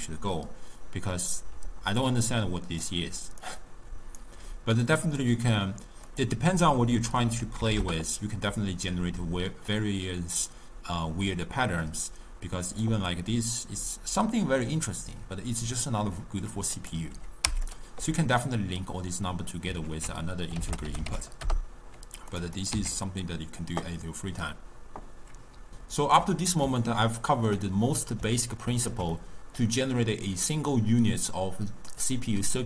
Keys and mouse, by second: 1.6 d, 2.0-2.9 drag, 2.9-3.4 d, 3.5 right click, 4.2 d, 6.1-9.2 drag, 9.7-12.7 drag, 16.8-17.8 drag, 19.9 ctrl+a, 22.6 click, 23.2 x, 26.9-32.0 ctrl+middle drag, 32.0 drag.